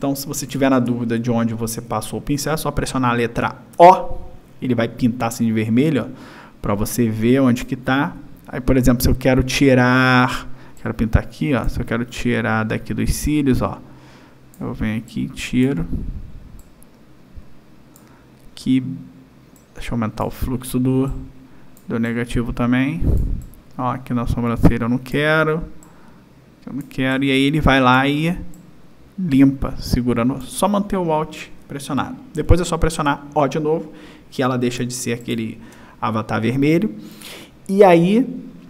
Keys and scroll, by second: 3.7 q, 33.0 o, 34.8 space.